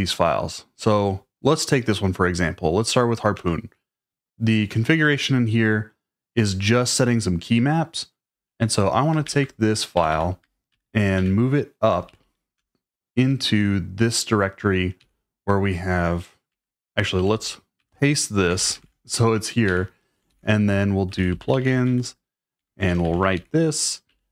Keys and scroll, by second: 3.3 Return, 9.3-12.1 typing, 12.5 Return, 15.0 o, 16.5 Escape, 17.2-24.3 typing, 22.6 Escape.